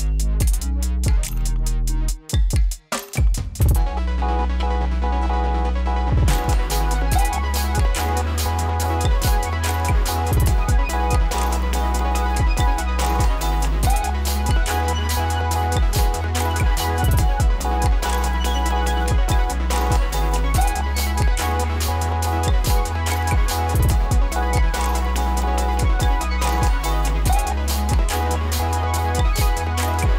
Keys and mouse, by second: 0.2-2.9 drag, 2.9 space, 4.9 click, 6.2 space, 10.3 space, 10.9 click, 11.6 right click, 12.4 click, 17.0 ctrl+a, 17.8 click, 21.3 r, 22.9-25.0 drag, 25.0 space, 27.8-29.7 drag, 29.7 s.